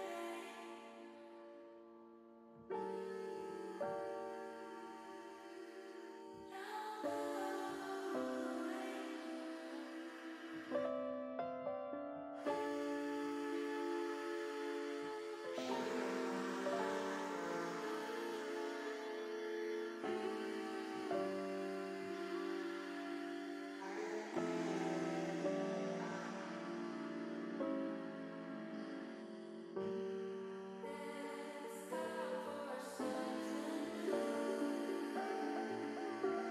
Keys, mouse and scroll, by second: 2.7 click, 3.9 alt+shift+click, 5.1 alt+shift+click, 6.0 alt+shift+click, 6.2 alt+shift+click, 7.4 ctrl+alt+click, 8.7 middle click, 9.6 shift+middle click, 11.1 middle click, 12.4 alt+shift+click, 14.1 alt+shift+click, 14.9 alt+shift+click, 15.3 middle click, 16.4-17.5 drag, 18.0 middle click, 19.8-21.1 middle drag, 21.7 middle click, 23.6 shift+middle click, 23.8 shift+middle click, 24.9 middle click, 25.9 shift+middle click, 27.7 ctrl+r, 33.8 click, 34.8 ctrl+r.